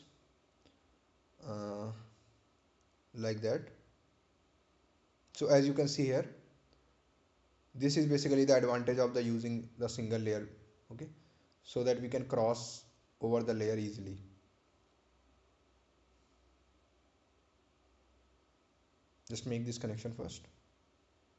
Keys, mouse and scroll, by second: 2.0 click, 6.7 click, 10.3 click, 16.4-17.1 scroll up 1, 18.0 scroll down 1.